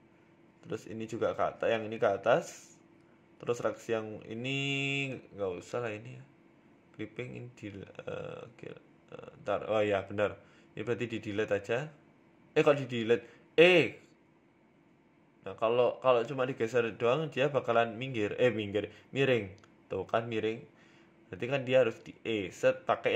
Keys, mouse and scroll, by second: 1.7 shift+middle click, 2.3 right click, 3.1 g, 5.6 right click, 6.6 click, 7.3 click, 8.4 g, 9.2 middle click, 9.5 Tab, 9.8 middle click, 11.4 scroll up 3, 11.6 shift+middle click, 11.9 Tab, 12.1 middle click, 12.8 middle click, 13.7 g, 15.4 middle click, 17.4 z, 17.8 z, 18.5 scroll down 3, 18.7 middle click, 18.9 z, 19.4 Tab, 19.7 Tab, 19.9 z, 20.8 KP_1, 21.2-21.8 scroll up 9, 21.7 shift+middle click, 22.2 ctrl+z, 22.6 ctrl+z, 22.8 ctrl+z.